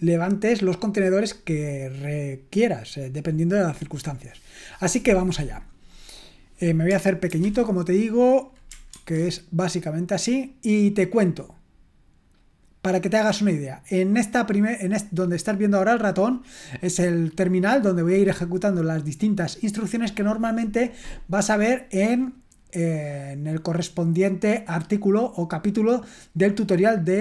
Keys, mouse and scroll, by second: 7.3 ctrl+2, 8.9 ctrl+1, 17.0 click.